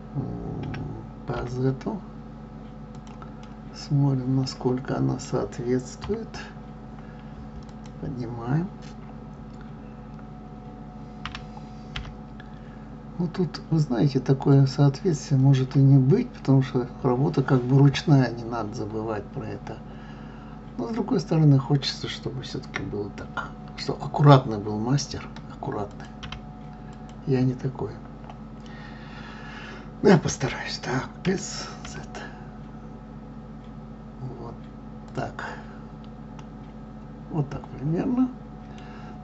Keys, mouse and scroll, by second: 3.4-5.9 middle drag, 5.9 KP_3, 7.7 click, 11.2 g, 25.7 click, 31.2 s, 36.4-39.2 middle drag.